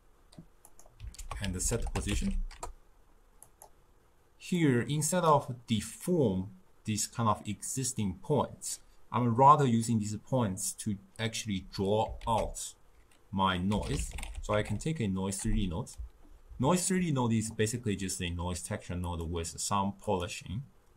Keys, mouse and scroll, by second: 3.6 ctrl+a, 4.8-20.9 drag.